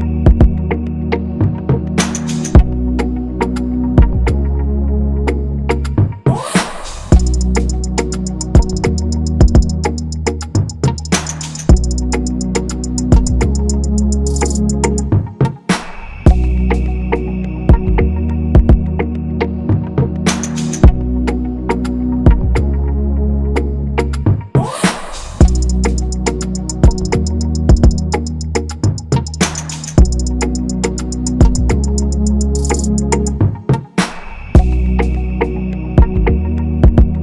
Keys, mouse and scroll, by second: 8.6 right click, 12.1 ctrl+z, 22.1 double click, 27.2 Escape, 27.8 ctrl+c, 31.7 ctrl+[, 32.5 typing.